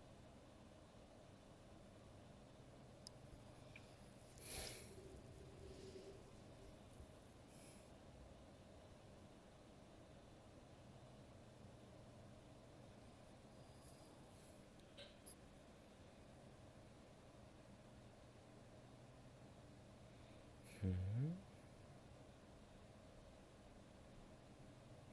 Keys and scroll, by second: 2.3 ctrl+z.